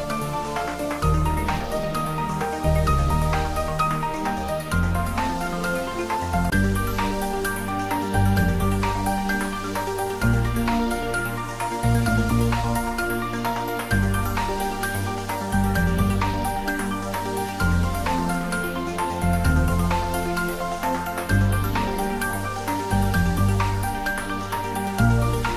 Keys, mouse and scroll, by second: 11.0 Right, 13.2 Right, 16.0 click, 18.7 click, 24.4 click.